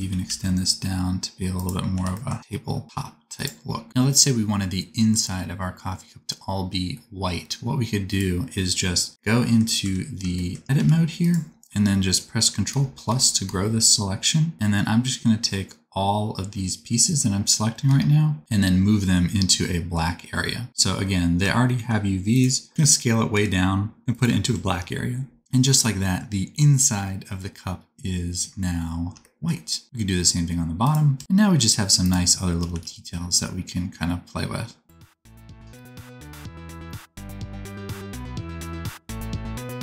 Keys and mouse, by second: 1.2 middle click, 1.9 g, 3.3-6.3 middle drag, 9.0-11.2 middle drag, 9.8 Tab, 10.7 3, 11.2 click, 11.3-12.7 middle drag, 12.7 ctrl+KP_Add, 12.7-14.5 ctrl+drag, 14.5-21.4 ctrl+middle drag, 17.9 ctrl+KP_Add, 21.4 s, 23.3 g, 24.4 Tab, 29.8 r, 30.8 click, 30.8-32.0 middle drag, 31.1 Tab, 31.2 click, 32.0 click, 32.5 r, 34.6 middle click, 34.8 click, 34.9-39.8 middle drag, 37.0 r.